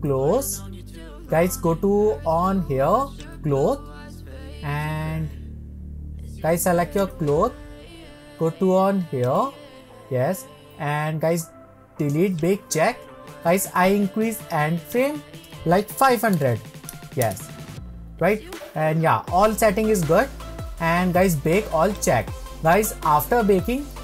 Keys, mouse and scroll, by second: 7.4 click, 12.6-24.0 drag.